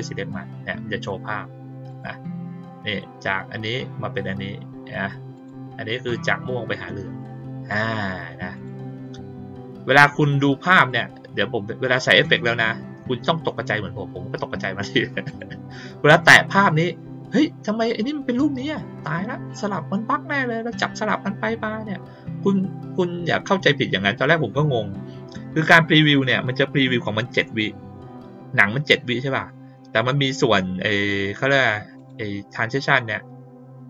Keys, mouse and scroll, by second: 1.8 click, 5.3 click, 7.6 click, 8.5 click, 10.8 click, 15.2 click, 16.1 click, 31.9 click.